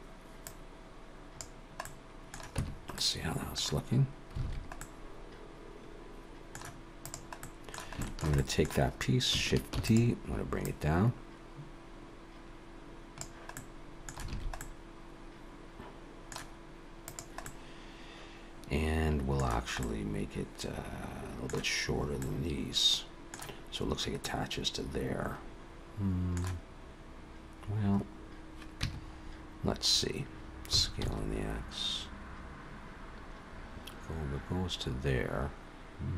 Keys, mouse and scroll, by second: 0.5 click, 1.8 middle click, 2.6 Tab, 3.0 middle click, 4.4 alt+a, 4.7 middle click, 7.0 click, 7.4 middle click, 8.0 shift+middle click, 8.4 middle click, 9.7 shift+d, 10.6 click, 13.5 middle click, 14.3 alt+a, 14.6 middle click, 16.9 click, 17.4 middle click, 19.8 middle click, 22.2 middle click, 24.2 middle click, 28.8 Tab, 30.7 s.